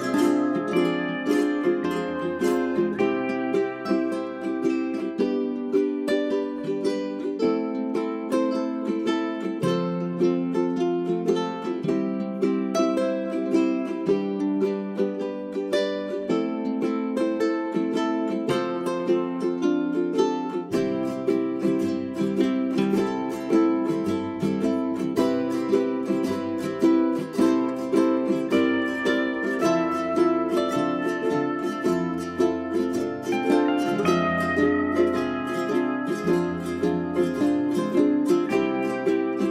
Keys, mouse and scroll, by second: 3.0 right click, 3.4 click, 6.3 g, 7.1-11.6 drag, 15.6 click, 20.9 w, 27.8 click, 29.1 right click, 29.3 click, 30.2 right click, 30.5 shift+click, 31.0 click, 32.0 Delete, 32.4 right click, 32.9 click, 34.2 Delete, 34.9-39.5 drag.